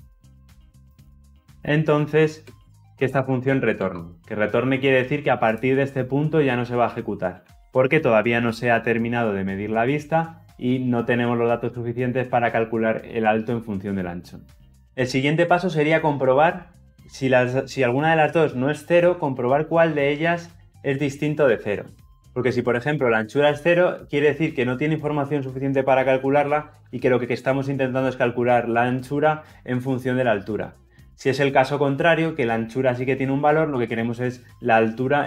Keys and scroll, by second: 3.5 Return.